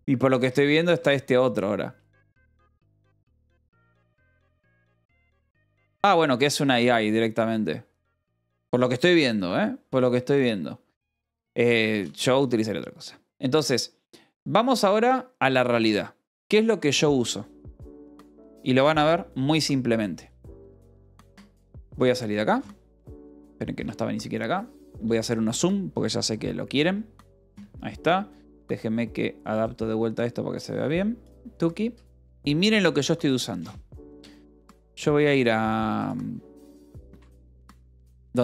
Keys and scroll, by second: 0.0-1.4 typing, 6.5 ctrl+=, 7.7 j, 21.5-22.4 typing, 23.6 alt+Tab, 23.7 q, 26.4 ctrl+=, 32.9 space, 33.4 o, 34.4 space, 35.3 o, 37.1-38.4 typing, 37.3 Return.